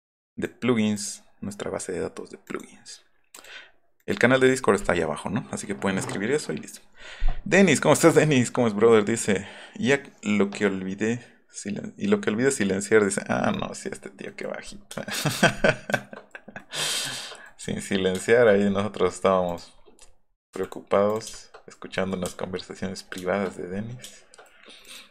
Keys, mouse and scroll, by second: 0.9 click, 2.4 click, 3.3 click, 4.0 click, 13.8 middle click, 14.0 middle click, 14.2 middle click, 14.4-15.0 middle drag, 15.3 middle click, 16.9 middle click, 17.4 middle click, 18.5 middle click, 19.4 click, 19.7 scroll up 1, 21.3 shift+middle click, 22.2 space, 23.7 middle click, 24.8 middle click.